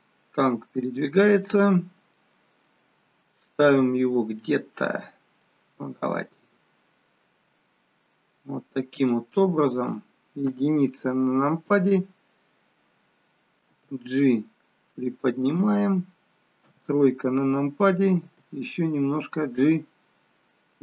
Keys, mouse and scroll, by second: 2.3 middle click, 3.2 middle click, 4.0-4.6 scroll down 3, 4.6 middle click, 4.6-5.8 scroll down 2, 5.8 g, 9.5 middle click, 10.4 KP_1, 16.6 KP_3, 18.1 g.